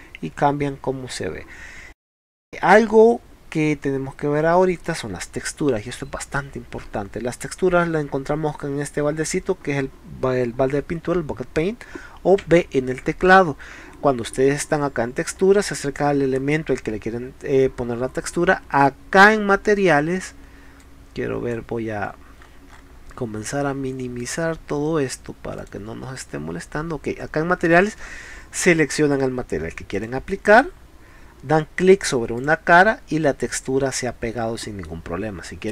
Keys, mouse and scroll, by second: 4.9-6.4 middle drag, 12.5 b, 15.3-15.7 scroll up 2, 16.0 middle click, 20.9-21.6 drag, 22.1-22.6 scroll up 2, 22.7 middle click, 24.2 click, 25.6 click, 30.0 click, 32.4 click, 33.5-34.8 middle drag.